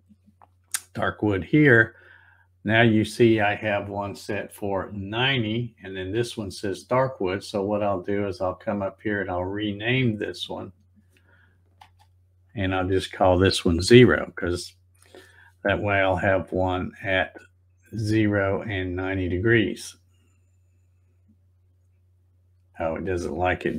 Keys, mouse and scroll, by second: 4.8 click, 6.1 click, 7.6 right click, 9.2 click, 10.5 click, 11.8 space, 17.1 click, 19.5 click, 22.7 click.